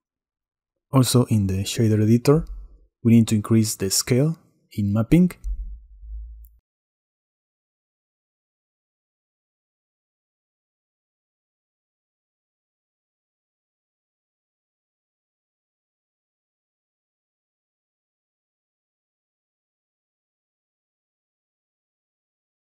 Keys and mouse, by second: 0.6 click, 1.4 click, 2.4 middle click, 3.1-4.3 drag, 4.3-6.7 middle drag, 7.4 middle click, 9.6 click, 10.7-13.5 drag, 15.2 middle click, 15.7 click.